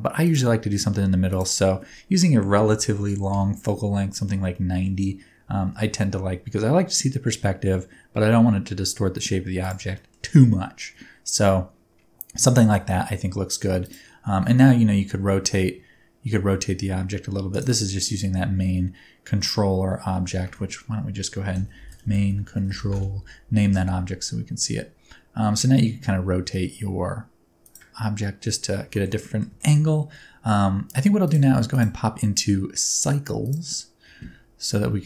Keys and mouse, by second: 1.4-4.1 drag, 4.5-4.9 middle drag, 5.4 g, 5.7 y, 9.5 click, 10.0 shift+middle click, 10.6 shift+middle click, 12.6 shift+middle click, 13.8 click, 14.3 r, 14.6 z, 17.5-20.4 right drag, 20.4 F2, 23.6 r, 23.9 z, 27.6 ctrl+click, 28.9 shift+middle click, 29.2 middle click, 29.6 shift+middle click, 31.7-34.4 drag.